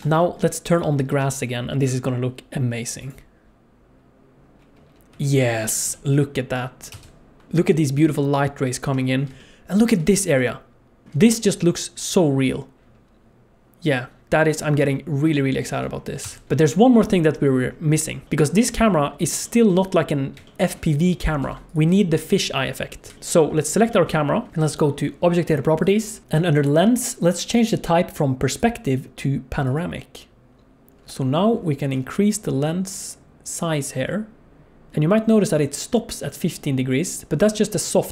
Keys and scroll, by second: 1.2 n, 5.6 alt+a, 5.9 n, 16.4 ctrl+s, 21.5 ctrl+s, 23.1 KP_Decimal.